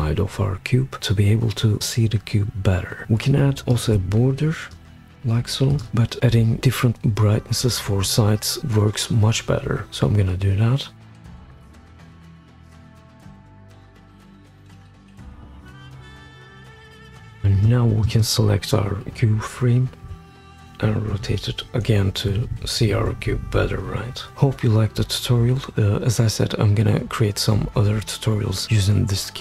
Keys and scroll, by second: 15.1 super+z, 15.2-17.8 typing, 16.2 shift+Down, 20.3 shift+Down, 21.1 shift+Up, 22.1 shift+Down, 22.3 shift+Down, 22.5 shift+Down, 24.4 shift+Down.